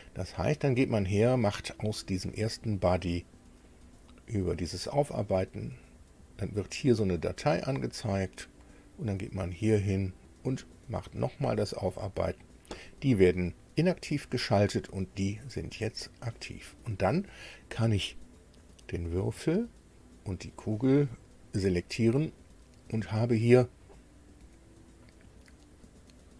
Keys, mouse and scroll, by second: 3.7 click, 7.6 click, 9.2 click, 11.2 click, 14.3 click, 15.4 click, 15.9 click, 17.0 click, 19.9 shift+click.